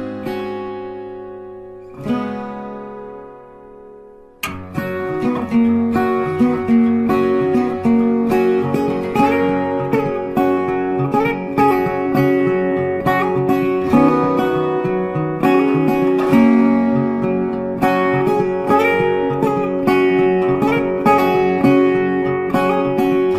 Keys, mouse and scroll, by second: 0.0 ctrl+v, 0.4 ctrl+space, 0.6 ctrl+click, 1.3 alt+shift+click, 1.8 ctrl+shift+space, 3.0 space, 3.4 ctrl+click, 4.3 double click, 11.3 space, 12.6 alt+click, 15.0 ctrl+space, 15.1 ctrl+click, 15.2 ctrl+space, 16.4 ctrl+click, 16.6 ctrl+space, 17.3 ctrl+shift+[, 19.1 alt+shift+click, 19.6 shift+click, 20.0 shift+click, 21.6 space, 23.0 alt+shift+click.